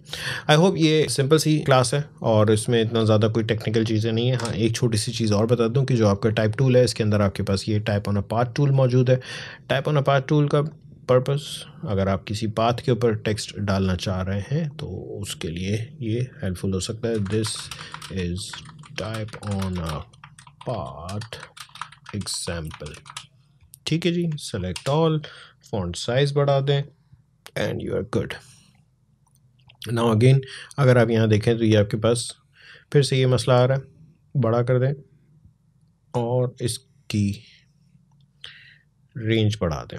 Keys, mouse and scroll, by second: 2.4 click, 4.2 Delete, 6.1-11.9 drag, 16.8-23.3 typing, 24.3 ctrl+a, 25.8 click, 29.0 click, 33.5-39.9 drag.